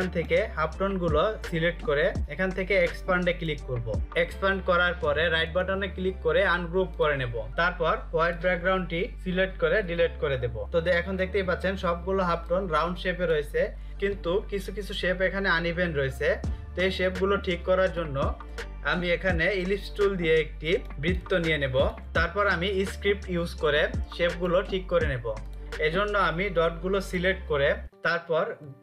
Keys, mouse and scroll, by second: 4.8 right click, 6.3 click, 10.6 ctrl+click, 13.9 click, 16.8 ctrl+0, 19.0 click, 22.0 click.